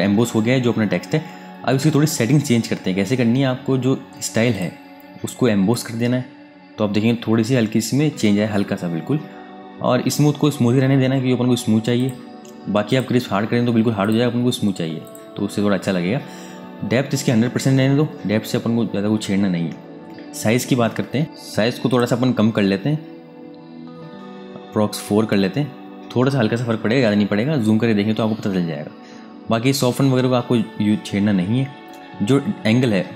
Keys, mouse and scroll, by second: 4.2 click, 11.7 click, 21.1 alt+Num_Lock, 21.2 alt+Tab, 21.6 click, 22.4-23.8 scroll down 1, 24.1-24.6 scroll up 1, 24.6 Tab.